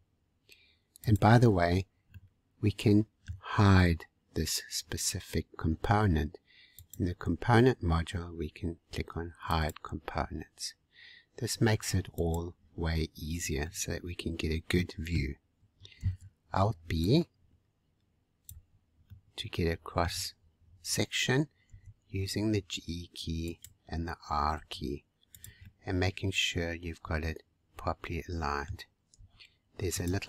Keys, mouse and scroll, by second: 1.5 scroll up 3, 2.1-5.1 middle drag, 6.7 click, 8.1-8.7 scroll down 2, 9.5-12.2 drag, 13.6-16.0 middle drag, 16.0 alt+b, 19.0-20.7 middle drag, 20.7 scroll up 1, 21.6 g, 24.5 r, 25.6-28.6 middle drag, 29.1 g.